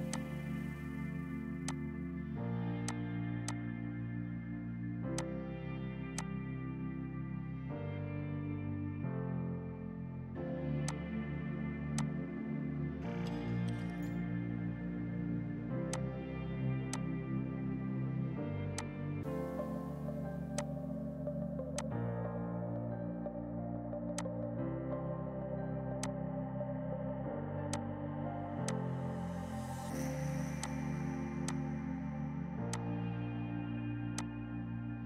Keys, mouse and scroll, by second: 1.7 shift+click, 2.6 ctrl+g, 2.9 shift+click, 3.1 c, 3.5 shift+click, 4.2 ctrl+u, 4.6 F4, 5.2 click, 5.9 F2, 6.2 click, 10.9 click, 13.8 space, 14.9 right click, 16.0 click, 17.3 F5, 18.8 click, 21.0 space, 21.8 click, 24.2 shift+click, 27.3 ctrl+k, 28.0 click, 28.3 Delete, 28.8 click, 34.0 F2, 34.2 click.